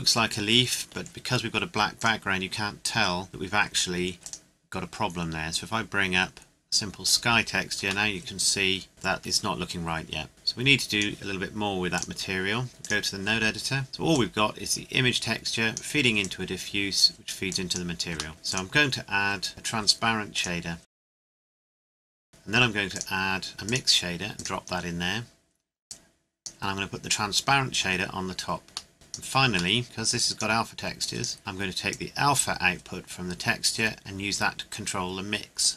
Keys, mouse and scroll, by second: 2.0 click, 4.2 click, 7.0 click, 8.1 middle click, 8.9-9.3 scroll up 1, 10.3 click, 13.8 scroll up 1, 14.1 click, 18.3 scroll up 2, 18.5 click, 20.3 click, 21.0 click, 28.6-28.9 scroll down 1, 28.9 click, 29.7 middle click, 30.1 click.